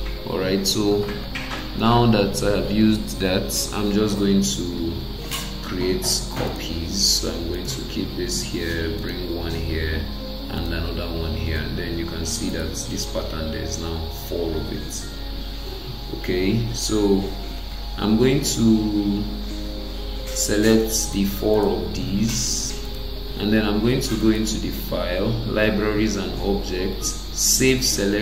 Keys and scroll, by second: 4.8 ctrl+d, 11.9 Escape.